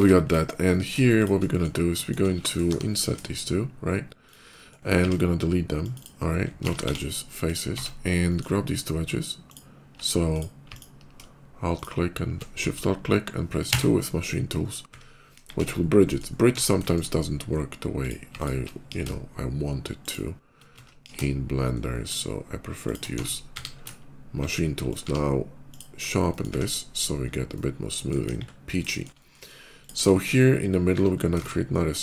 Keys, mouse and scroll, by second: 0.1 click, 0.5 middle click, 1.0 click, 1.4 middle click, 1.8 shift+middle click, 2.2 shift+middle click, 2.5 i, 3.2 shift+i, 4.1 click, 4.4 shift+middle click, 4.8 x, 5.6 click, 6.5 ctrl+z, 6.5 x, 6.7 ctrl+z, 7.2 click, 7.4 Tab, 8.1 middle click, 9.2 alt+click, 10.0 alt+click, 10.5 alt+click, 11.6 alt+shift+click, 13.4 2, 14.1 middle click, 15.0 KP_5, 15.4 Tab, 15.9 middle click, 16.7 middle click, 17.8 click, 18.2 alt+click, 18.7 ctrl+b, 19.9 click, 20.6 ctrl+z, 20.7 ctrl+b, 20.9 ctrl+b, 21.1 ctrl+z, 21.6 shift+middle click, 22.7 shift+click, 22.9 Tab, 23.2 q, 23.4 Tab, 24.7 ctrl+shift+click, 24.9 q, 25.5 click, 25.8 scroll down 1, 26.1 middle click, 27.2 middle click, 28.1 KP_5, 28.7 shift+middle click, 28.9 shift+KP_5, 29.0 middle click, 29.6 click, 29.8 Tab, 31.2 shift+middle click, 31.2 Tab, 31.2 shift+a.